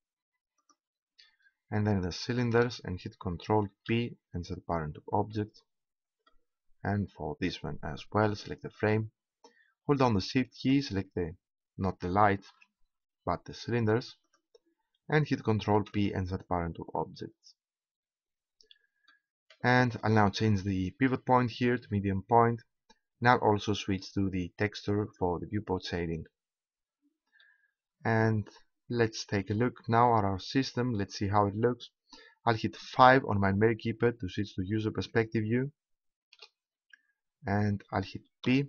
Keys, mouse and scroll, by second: 3.7 ctrl+p, 7.8-12.5 right drag, 12.5 ctrl+z, 14.9-16.0 right drag, 15.7 ctrl+p, 18.9-20.2 middle drag, 21.4-25.5 drag, 27.5-29.5 middle drag, 32.8 KP_5, 38.5 p.